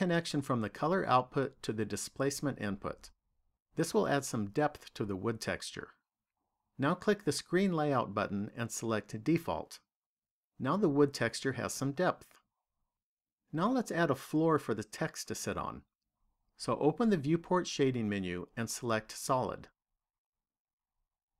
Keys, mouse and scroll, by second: 9.5 click, 17.3 click.